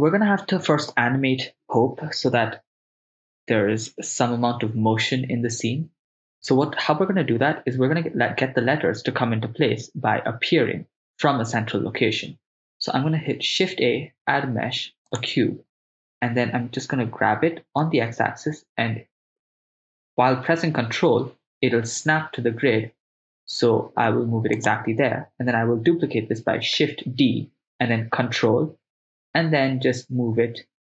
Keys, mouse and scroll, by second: 12.9 shift+a, 17.1 g, 17.8 x, 24.6 ctrl+click, 26.9 shift+d.